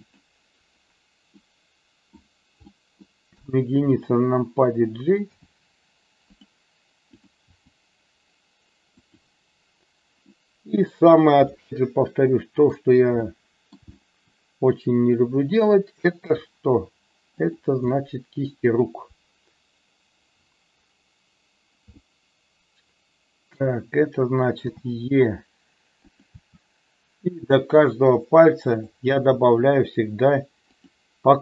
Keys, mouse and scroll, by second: 0.1 click, 1.3 middle click, 2.7 middle click, 3.5 KP_1, 5.3 g, 6.3 click, 7.2 click, 7.5 g, 9.0 click, 10.2 middle click, 11.4-12.7 middle drag, 13.2 shift+middle click, 13.8 middle click, 16.2 g, 17.3 click, 18.0 middle click, 22.0-23.6 shift+middle drag, 24.7 e, 26.1 click, 26.3 e, 27.6 click, 28.7 click, 30.7 click.